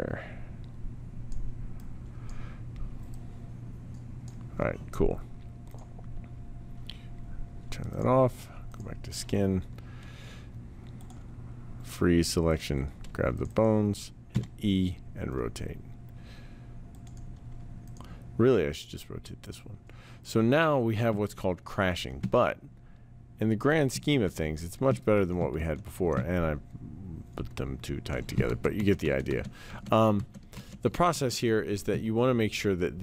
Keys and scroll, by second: 14.2 e, 24.1 ctrl+z, 25.5 ctrl+z, 28.5 ctrl+z, 28.9 ctrl+z.